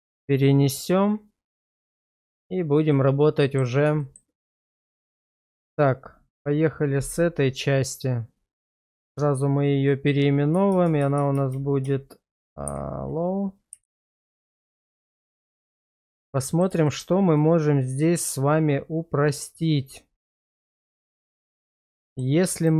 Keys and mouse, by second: 1.5 middle click, 2.0 shift+middle click, 2.9-3.6 middle drag, 4.0 shift+middle drag, 6.3 /, 9.0 shift+r, 10.7-11.8 typing, 16.0-16.6 middle drag, 16.8 shift+middle click, 17.4-21.5 middle drag, 22.0 shift+middle drag, 22.6 click.